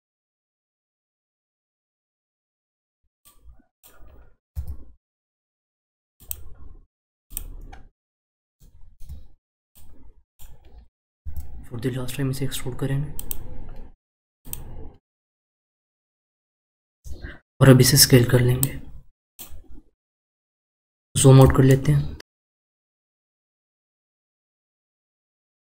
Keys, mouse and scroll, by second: 0.6 shift+middle click, 1.2-1.8 scroll up 3, 1.8 click, 2.2-3.2 shift+middle drag, 3.2 click, 4.5 e, 6.5 scroll down 2, 7.3 click, 7.7-8.5 scroll up 2, 8.5-9.7 shift+middle drag, 9.7 click, 11.2 e, 13.7-14.4 scroll down 3, 14.4 click, 18.6 click, 21.0-21.7 scroll down 2, 21.7-22.7 shift+middle drag, 22.7-23.9 scroll down 3, 23.9-25.6 shift+middle drag.